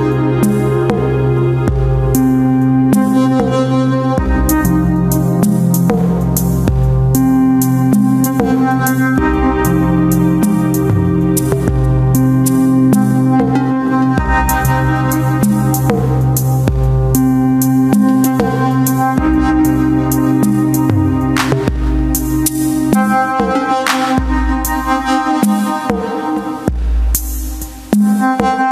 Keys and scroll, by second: 5.4 space, 7.4 space, 9.0 space, 12.2 ctrl+KP_Subtract, 13.0 ctrl+y, 13.6 ctrl+space, 14.0 Return, 24.6 ctrl+space, 25.2 w, 26.0 ctrl+alt+d, 26.4 Return, 27.0 ctrl+n, 28.2 ctrl+m.